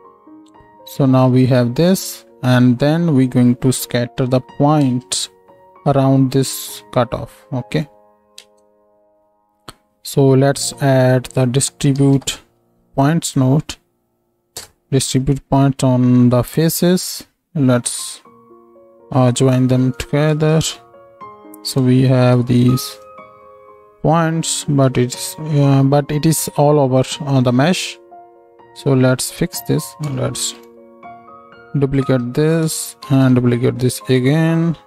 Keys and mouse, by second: 4.9 ctrl+space, 8.2 ctrl+middle click, 8.4 ctrl+space, 15.6-18.0 drag, 22.2 shift+e, 30.4 ctrl+shift+d, 32.3 middle click, 33.0 ctrl+shift+d, 33.2 ctrl+click, 33.3-34.8 right drag.